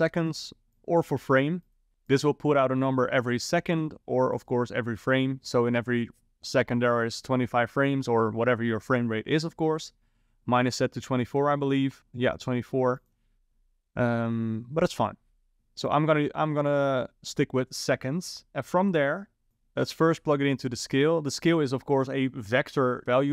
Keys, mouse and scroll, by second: 0.8 click, 2.1 click, 11.2 click, 13.0 click, 15.5 click, 16.7 click, 19.5 click.